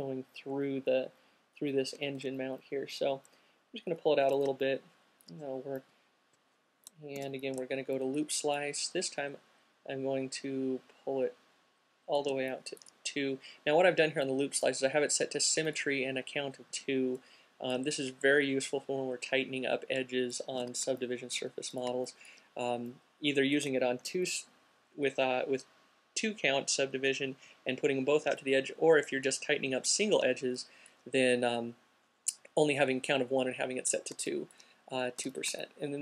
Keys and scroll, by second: 2.9 alt+shift+q, 6.7 c, 20.8 q, 24.3 c, 35.4 alt+q.